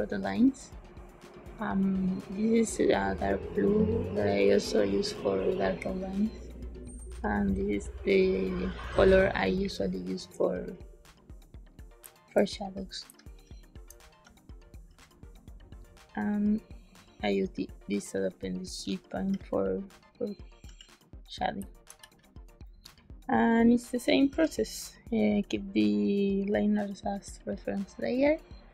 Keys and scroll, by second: 11.9 space, 12.6 b, 13.0 space, 20.6 g, 21.5 space, 21.9 b, 24.2 z.